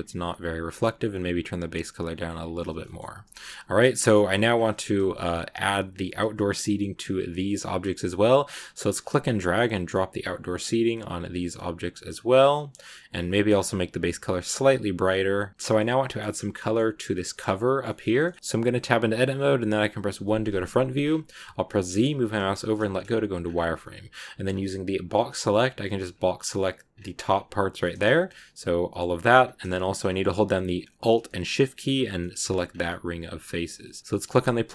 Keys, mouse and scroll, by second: 2.6 scroll down 2, 2.7 middle click, 2.9 a, 3.2 shift+middle click, 4.1-4.5 scroll up 10, 8.8-10.1 drag, 11.2 click, 12.4-13.8 middle drag, 13.8 click, 15.5-17.3 middle drag, 17.3-17.7 scroll up 1, 17.7-20.0 shift+middle drag, 20.0 KP_1, 20.9 scroll up 2, 21.5 z, 22.9 scroll down 2, 23.3 scroll up 1, 23.6 b, 26.8 scroll down 2, 27.7 scroll down 1, 27.7 middle click, 27.9 z, 28.2-29.3 middle drag, 29.3-29.6 scroll up 1, 29.6 shift+middle click, 29.9-31.8 scroll up 1, 31.8 alt+shift+right click, 32.6 scroll down 2, 32.7-34.0 middle drag, 34.0 scroll up 1, 34.2-34.7 drag.